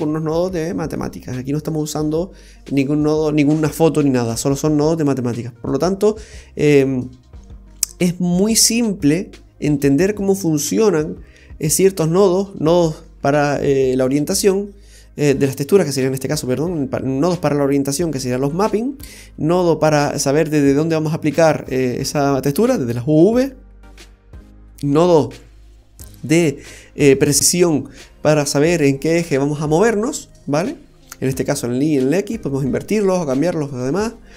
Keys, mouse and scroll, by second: 0.0-1.5 scroll down 17, 1.3 middle click, 2.0 scroll up 1.